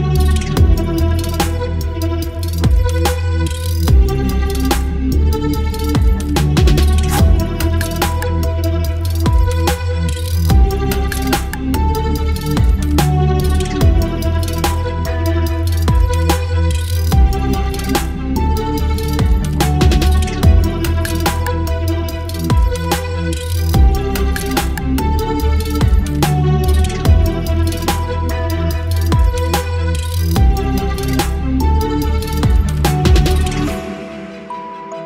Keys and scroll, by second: 1.9 ctrl+BackSpace, 3.8 ctrl+BackSpace, 4.7 space, 5.0 v, 6.5 v, 7.4 ctrl+t, 10.0 Return, 11.4 space, 11.6 l, 12.9 ctrl+BackSpace, 13.5 Delete, 16.1 ctrl+BackSpace, 17.1 Delete, 18.3 Delete, 20.9 ctrl+BackSpace, 22.4 space, 24.9 ctrl+BackSpace, 25.5 space, 27.2 ctrl+BackSpace, 28.7 Delete, 30.1 space, 31.0 space, 32.3 space, 32.8 v, 34.3 v.